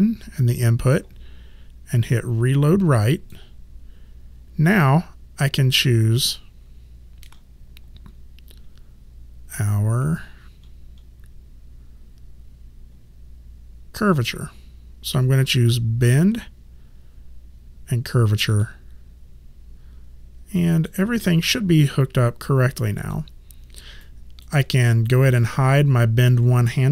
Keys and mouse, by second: 3.1 click, 16.0 click, 18.5 click, 20.6 click, 23.0 click.